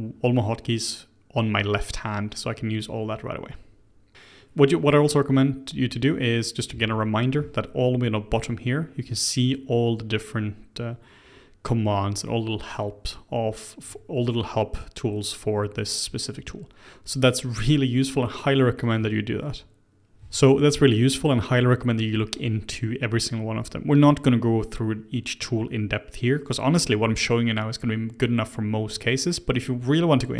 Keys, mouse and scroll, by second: 6.7 k, 20.1 k.